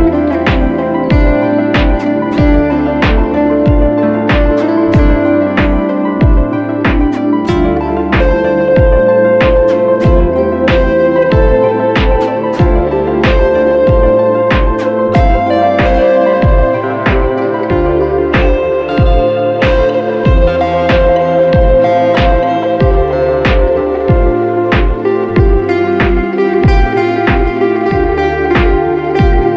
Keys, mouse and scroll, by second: 14.2 ctrl+alt+shift+e, 14.2 typing.